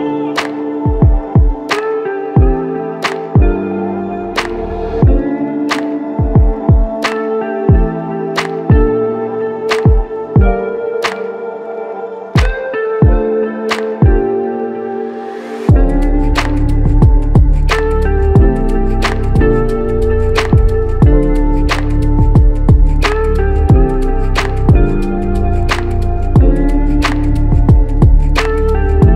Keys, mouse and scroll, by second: 0.6 alt+click, 9.3 alt+click, 11.9 alt+click, 12.1 alt+double click, 18.6 double click, 25.1 click, 25.4 alt+click, 27.3 alt+click.